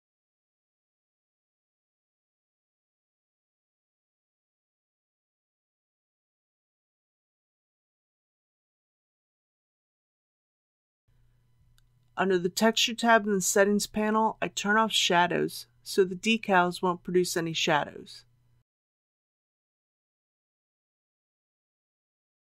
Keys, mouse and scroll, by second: 1.8 click, 2.5 KP_Decimal, 2.8 KP_0, 3.1 KP_1, 7.0-8.0 scroll up 1, 10.0-11.2 scroll down 1, 11.9 click, 12.7-13.5 scroll down 1, 18.5 click.